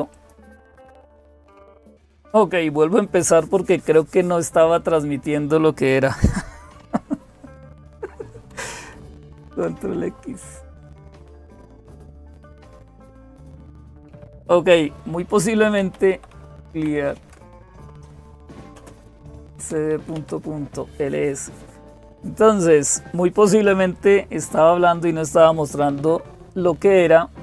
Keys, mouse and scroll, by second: 0.0-27.4 typing, 0.0 click, 8.8 ctrl+x, 17.2 Return.